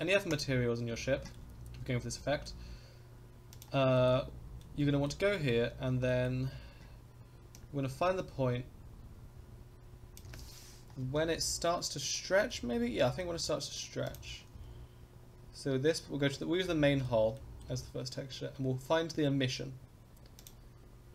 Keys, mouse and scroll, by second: 0.3 click, 0.9-1.3 scroll down 2, 1.3-2.5 shift+middle drag, 1.4 scroll up 1, 2.2 click, 3.5 click, 3.9 shift+middle drag, 4.2 scroll up 2, 4.6 middle click, 5.3 shift+middle click, 5.7 scroll down 2, 6.1 middle click, 6.3-7.6 scroll down 2, 7.6-10.2 drag, 11.0 Right, 11.3 Right, 12.5-13.2 middle drag, 14.0 click, 14.6 Left, 16.0-16.6 scroll down 1, 16.6-17.0 middle drag, 16.6 scroll down 1, 17.3 middle drag, 18.2 scroll down 2, 20.3 click.